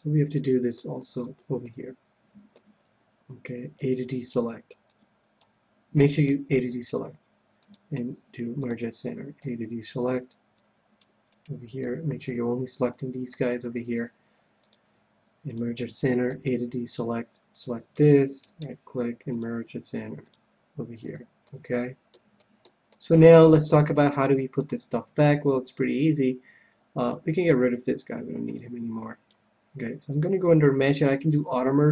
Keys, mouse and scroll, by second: 4.2 a, 4.4 c, 6.4-8.2 right drag, 7.5-9.4 drag, 9.4 a, 10.0 c, 11.4-13.1 right drag, 11.8-13.6 middle drag, 14.5-16.5 drag, 16.3 a, 17.0 c, 18.6-20.2 right drag, 19.3-20.9 drag, 21.0 click, 21.0 a, 21.4-23.0 middle drag, 23.4-25.7 middle drag, 28.5-31.8 drag.